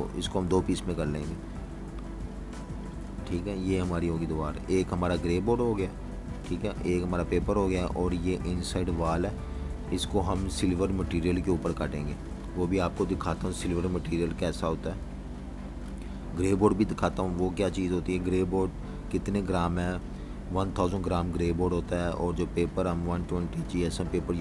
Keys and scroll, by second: 0.0-1.2 typing, 0.5 Return, 2.6 super+-, 3.2-4.4 typing, 8.6-12.2 typing, 14.8-17.9 typing, 20.8 typing, 22.3 v.